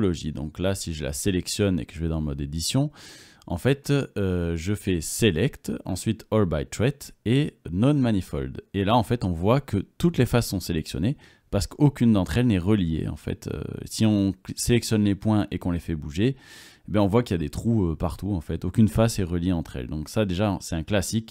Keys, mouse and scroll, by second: 1.7 Tab, 1.7-4.8 right drag, 5.5 middle click, 12.6-13.9 drag, 13.9-15.3 drag, 15.3-16.6 right drag, 15.3 g, 17.5 right click, 17.7 g, 19.1 g, 20.3 middle click, 21.1 click.